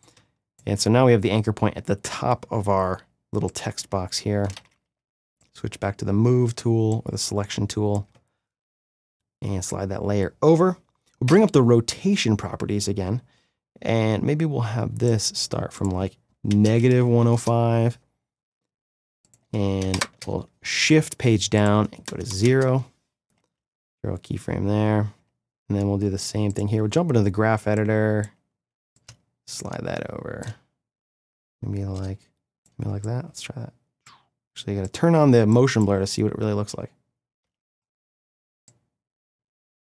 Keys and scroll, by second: 4.7 c, 5.0 v, 11.3 r, 16.5 KP_Subtract, 16.6-17.4 typing, 19.9 shift+Page_Down, 22.3 0, 22.4 Return, 23.5 F9, 36.5 space.